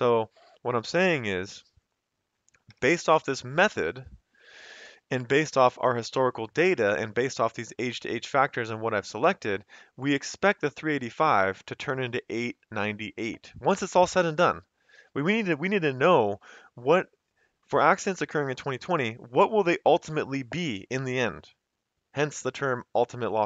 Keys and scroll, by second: 2.7 Return, 13.3 F2, 13.7 Escape.